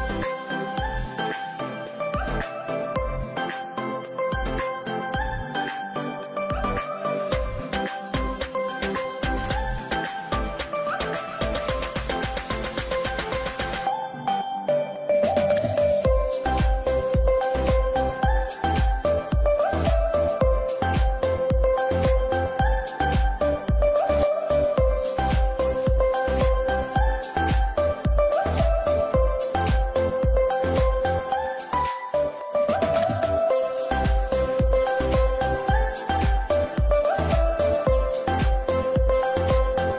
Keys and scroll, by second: 2.8 Delete, 3.9 shift+Page_Down, 6.7 F2, 7.6 Escape, 16.8 Escape, 22.3 c, 22.4 e, 22.9 Escape.